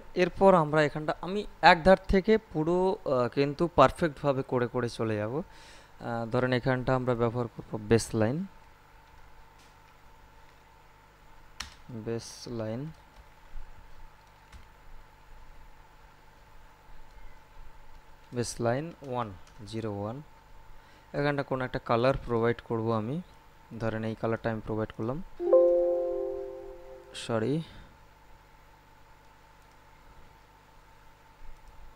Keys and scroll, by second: 8.9 shift+b, 9.6 a, 9.9 s, 11.4 space, 12.7 shift+l, 13.0 i, 14.3 n, 17.8-20.0 typing.